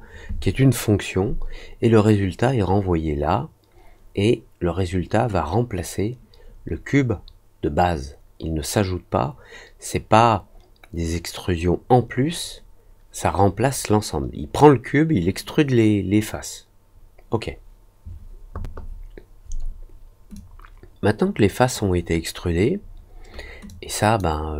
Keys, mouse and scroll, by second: 20.3-21.7 drag, 23.6 click.